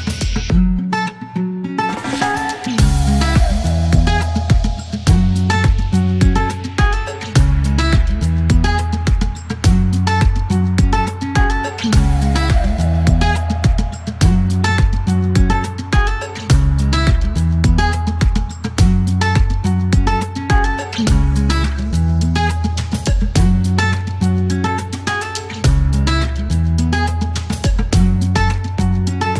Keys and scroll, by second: 5.8 KP_1, 5.9 KP_3, 6.4 Return, 8.4 typing, 9.4 alt+e, 12.4 typing, 12.4 alt+l, 13.3 alt+e, 14.5 space, 16.5 alt+m, 16.6 z, 20.8 typing, 21.4 ctrl+e, 23.2 alt+q, 25.3 alt+q, 25.4 typing, 28.0 alt+q, 29.0 alt+q.